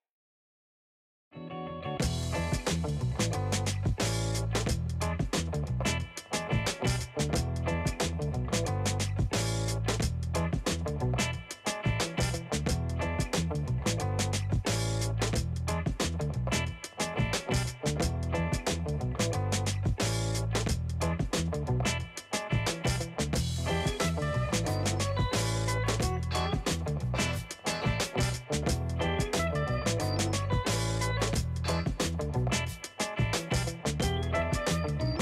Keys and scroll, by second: 2.7 space, 28.3 Delete, 29.1-35.2 ctrl+space, 30.4-34.3 space.